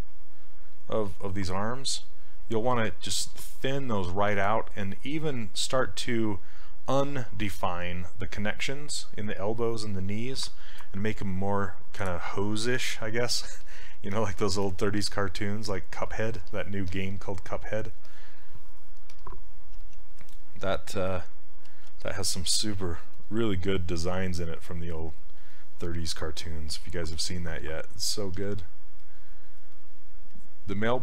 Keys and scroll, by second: 19.8 s, 21.8 ctrl+z, 28.4 s.